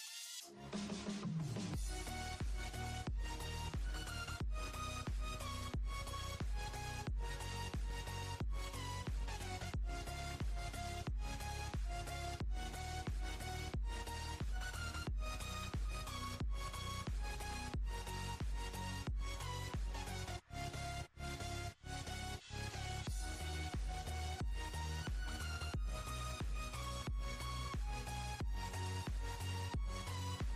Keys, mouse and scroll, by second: 0.0 click, 1.7-3.1 scroll up 4, 3.1 click, 7.5 click, 8.7 click, 9.3 scroll down 3, 10.1 click, 10.9 scroll down 2, 11.3-11.7 scroll up 4, 12.6-14.3 drag, 16.8 click, 23.7 click, 26.0 click, 27.9 click, 29.2 Tab, 29.6 Tab, 30.1 click.